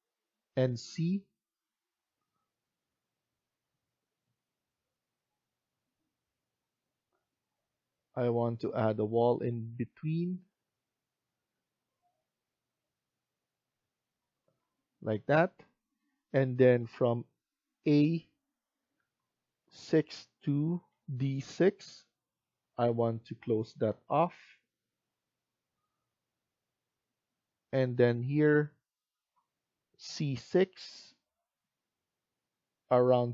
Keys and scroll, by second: 15.1 Escape, 26.7 Escape.